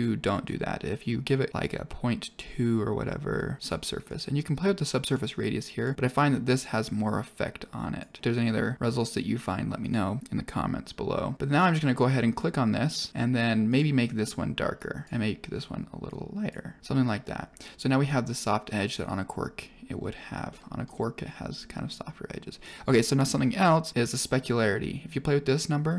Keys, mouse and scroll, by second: 3.3 click, 4.0 click, 5.1 drag, 5.7-7.9 drag, 9.7 click, 13.6 click, 16.8 click, 20.4-20.8 middle drag, 24.5-25.9 drag.